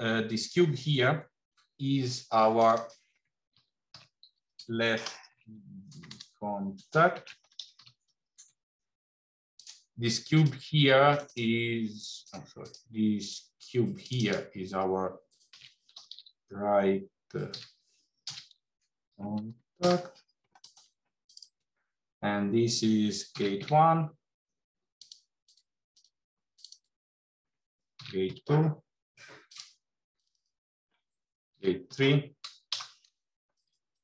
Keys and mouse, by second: 2.5-9.7 drag, 6.0 BackSpace, 10.2 click, 11.2-12.7 drag, 13.0 click, 14.1-20.6 drag, 21.1 click, 21.3-25.1 drag, 26.4 click, 26.6-29.5 drag, 30.0 click, 30.3-33.7 drag, 33.9 click.